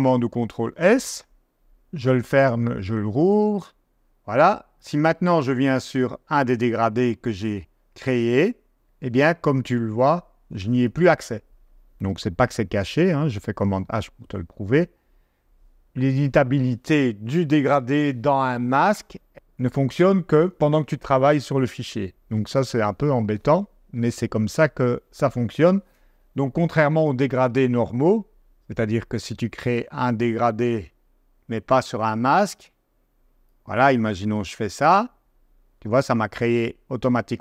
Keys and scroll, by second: 1.6 super+w, 12.1 super+h.